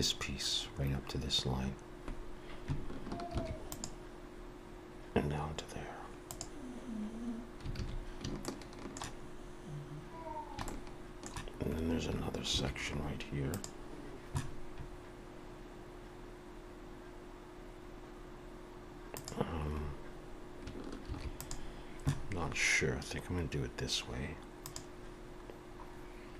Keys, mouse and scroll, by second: 3.3 ctrl+r, 7.8 alt+a, 8.5 shift+middle click, 9.3 scroll up 1, 10.3 scroll down 1, 10.7 shift+middle click, 12.5 ctrl+r, 21.1 ctrl+r, 25.5-25.8 scroll down 3.